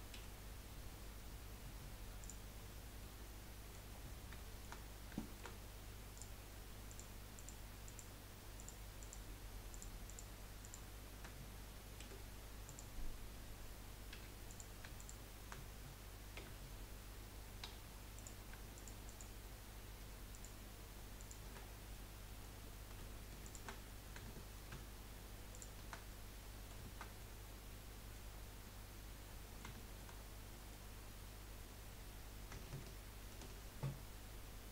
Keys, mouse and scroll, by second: 0.1 Delete, 2.6-3.0 scroll down 5, 3.0 middle click, 3.9-4.3 scroll up 3, 4.3 shift+middle click, 4.8-5.2 scroll up 2, 5.2-6.2 shift+middle drag, 6.2 click, 6.9 shift+click, 7.3 shift+click, 7.8 shift+click, 8.6 shift+click, 9.0 shift+click, 9.7 shift+click, 10.0 shift+click, 10.6 shift+click, 12.0 Delete, 14.1 3, 14.5 click, 15.0 shift+click, 16.4 2, 18.7 alt+shift+click, 19.0 alt+shift+click, 20.3 alt+shift+click, 21.2 alt+shift+click, 21.6 scroll down 2, 21.9 middle click, 22.6-23.4 scroll up 2, 23.4 alt+shift+click, 23.9-25.5 middle drag, 25.5 alt+shift+click, 26.1-28.3 middle drag, 28.3 scroll down 2, 28.6-30.1 middle drag, 30.1-30.5 scroll up 2, 30.5 middle click, 30.9-31.2 scroll up 1, 33.4 ctrl+b.